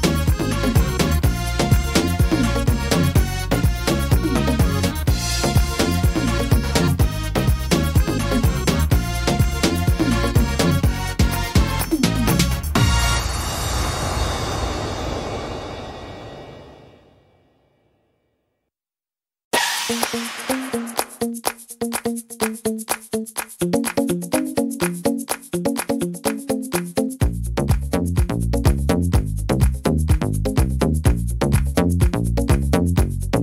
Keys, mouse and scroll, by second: 0.1 shift+right click, 0.9 shift+right click, 3.3 middle click, 7.5 ctrl+r, 9.1 middle click, 9.8 right click, 11.0 click, 12.1 right click, 12.1 click, 12.6 shift+right click, 13.5 click, 14.7 middle click, 16.6 click, 18.7 right click, 19.7 shift+right click, 21.3 shift+right click, 22.4 shift+right click, 23.0 shift+right click, 23.7 shift+right click, 23.8 middle click, 24.6 scroll down 1, 25.7-26.4 scroll down 1, 25.7 e, 27.4 middle click, 30.0 ctrl+z, 30.7 middle click, 31.3 ctrl+z, 32.1 shift+right click, 32.5 middle click.